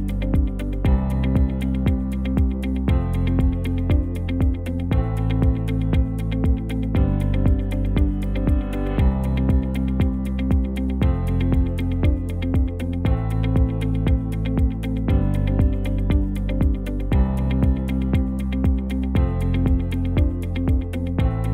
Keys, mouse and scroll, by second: 3.0 Tab, 3.9 a, 5.9 ctrl+t, 13.5 Tab, 14.8 KP_1, 16.9 Tab, 18.5 ctrl+t, 20.5 Tab.